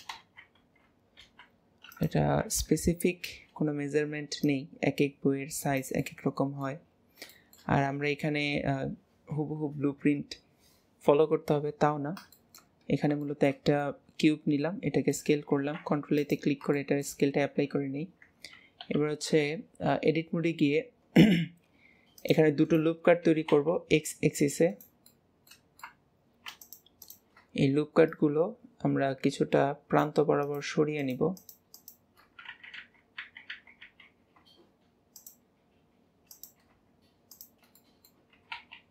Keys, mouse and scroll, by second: 0.1 alt+z, 2.4 KP_3, 3.4-4.4 scroll up 2, 4.4 click, 6.0 middle click, 6.8 scroll down 2, 7.3-12.8 shift+middle drag, 12.8 scroll up 1, 13.2-15.5 shift+middle drag, 15.5 ctrl+a, 16.7 shift+middle click, 17.2 scroll up 1, 17.6 Tab, 18.9 ctrl+r, 25.0-26.3 middle drag, 26.6 alt+shift+click, 27.0 alt+shift+click, 28.1 click, 30.4 click, 31.0 click, 31.4 alt+shift+click, 31.8 alt+shift+click, 32.5 ctrl+z, 32.8 ctrl+z, 35.1-37.4 drag, 37.8 middle click, 38.3 s.